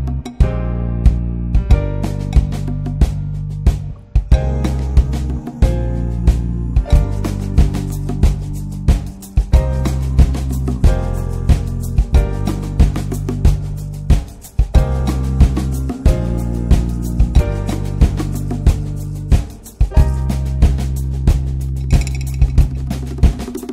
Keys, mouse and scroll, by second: 3.3 scroll down 2, 3.5 middle click, 3.8 click, 4.2 shift+middle click, 4.3 shift+scroll up 1, 4.4-4.9 middle drag, 4.9-5.7 scroll up 3, 5.1 ctrl+s, 5.4 shift+middle click, 5.7-6.7 middle drag, 6.7 ctrl+s, 6.8-9.0 scroll down 5, 9.0-10.2 scroll down 1, 10.2-11.8 scroll down 1, 11.8 ctrl+shift+click, 12.8 scroll down 1, 13.0-13.5 middle drag, 13.5-14.6 scroll up 4, 14.6-15.2 scroll up 1, 15.2-17.7 drag, 17.7 shift+d, 19.5 click, 19.9 scroll down 2, 20.1-21.8 middle drag, 21.8-22.4 ctrl+shift+right drag, 22.4 middle drag, 22.7 ctrl+shift+click.